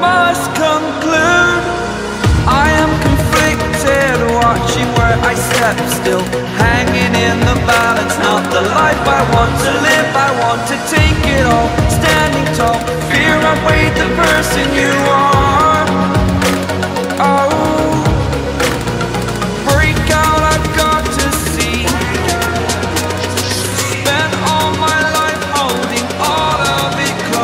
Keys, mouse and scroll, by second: 0.0 scroll down 1, 1.8 scroll up 1, 2.9-5.1 drag, 6.7-12.5 shift+drag, 13.4 click, 15.4-23.5 drag, 27.2 click.